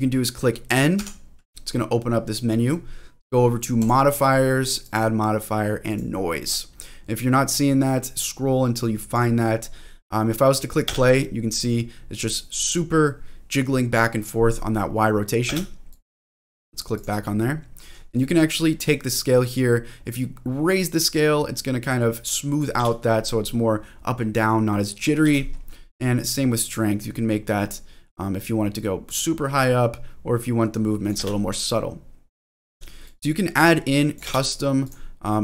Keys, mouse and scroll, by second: 1.0 n, 3.8 click, 4.8-5.9 drag, 7.1-9.1 drag, 9.4-9.9 scroll down 2, 9.9-10.3 scroll up 2, 10.3-10.9 scroll down 1, 10.9 space, 12.6 click, 15.5 space, 15.9 click, 16.9 click, 19.1-22.6 drag, 22.8 space, 23.2 middle click, 25.3 space, 26.2-31.2 drag, 31.2 space, 32.7 space, 33.0-34.2 drag, 34.2 space, 34.9 click.